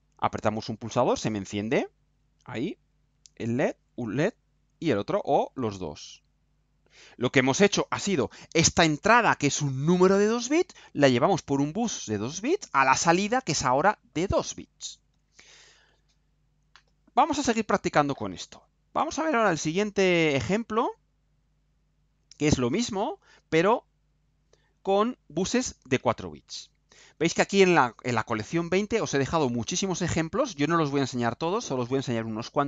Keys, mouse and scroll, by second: 22.0 click.